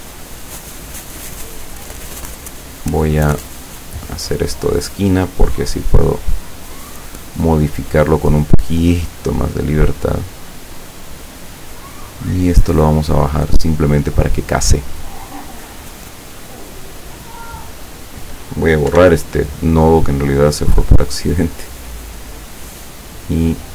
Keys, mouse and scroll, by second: 0.0-1.4 drag, 1.9 click, 3.5 click, 5.5 click, 6.7 click, 7.7 click, 8.4-11.0 drag, 12.5-14.4 drag, 18.0 click, 18.9 Delete, 20.4-22.8 drag, 23.3 click.